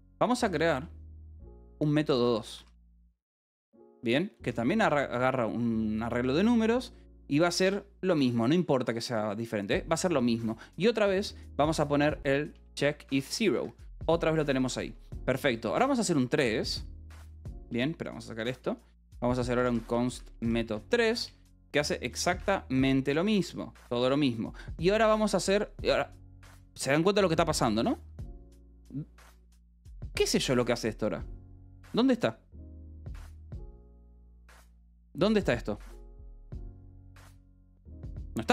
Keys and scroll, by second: 0.0-0.9 typing, 2.0-4.0 typing, 4.9 ctrl+g, 8.1 Escape, 8.3 k, 9.5-12.4 typing, 13.5 Escape, 14.8 j, 15.8 Return, 17.5 BackSpace, 19.1-21.2 typing, 22.7 ctrl+g, 24.5 ctrl+s, 26.2 Escape, 29.1 k, 29.9 l, 32.9-34.7 typing, 35.1 Escape.